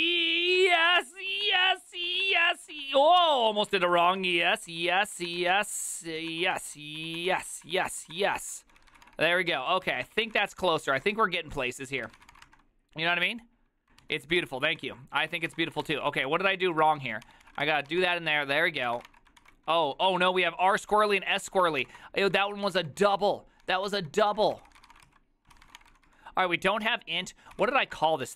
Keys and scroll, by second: 0.4-12.8 typing, 9.6 ctrl+u, 10.0 ctrl+u, 14.2 alt+{, 14.5 ctrl+c, 14.7-28.3 typing, 16.2 ctrl+d, 18.1 Return, 18.2 ctrl+u, 18.4 ctrl+u, 25.6 ctrl+c.